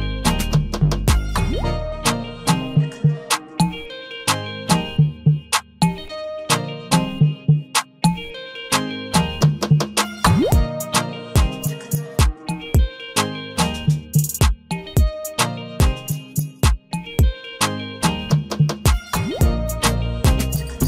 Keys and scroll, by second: 6.8 ctrl+a, 8.7 ctrl+d.